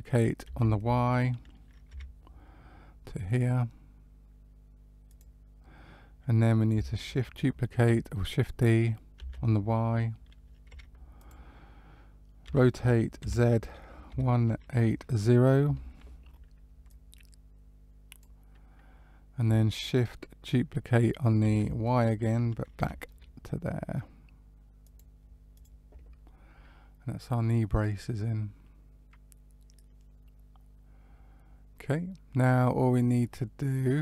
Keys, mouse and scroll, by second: 0.4 shift+d, 9.2 shift+d, 12.4 r, 16.8 click, 21.4 shift+d, 25.5 click, 26.2 middle click.